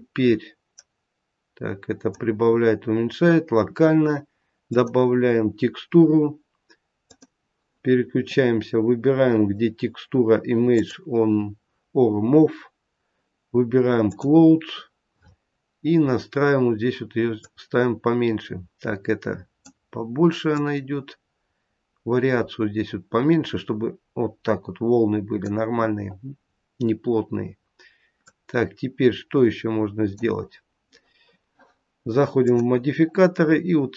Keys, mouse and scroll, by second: 4.6 click, 6.9 click, 10.6 click, 15.7-17.4 scroll down 1, 17.4 click, 17.4-18.4 scroll down 3, 20.5 click, 28.2 click, 32.4 click.